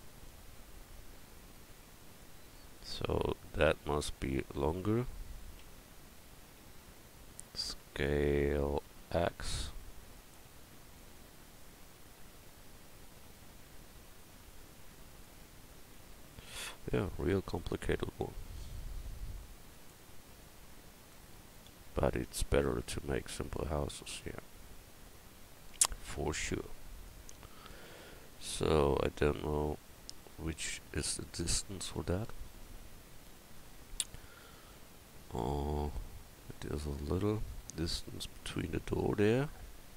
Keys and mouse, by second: 3.5-5.6 drag, 5.6 Tab, 6.6 a, 6.9 a, 7.3 s, 8.7 s, 16.0 Tab, 17.7 Tab, 20.9-27.1 drag, 27.4 Tab, 32.3 KP_1.